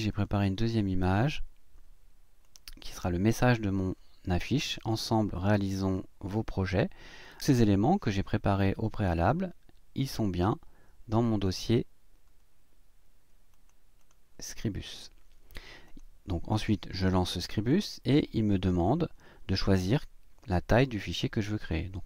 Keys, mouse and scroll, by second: 0.1 click, 2.4 click, 7.4 click, 10.0 click, 11.3 click, 13.5 click, 14.0 click, 15.9 click, 17.7 click.